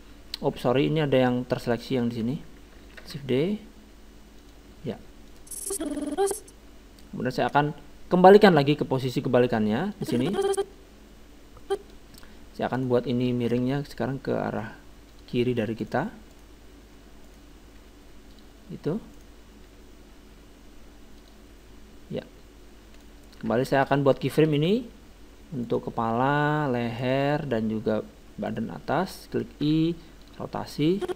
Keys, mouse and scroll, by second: 0.4 ctrl+z, 1.7-3.5 right drag, 3.0 shift+d, 5.3-7.0 drag, 10.0-11.7 drag, 12.8-14.5 right drag, 13.6 r, 15.8-18.9 right drag, 17.8 r, 19.2-20.9 right drag, 19.5 r, 23.0-24.6 right drag, 23.8 click, 24.5-26.3 middle drag, 25.7-30.1 right drag, 29.6 i, 30.2 right click, 30.9-31.1 drag.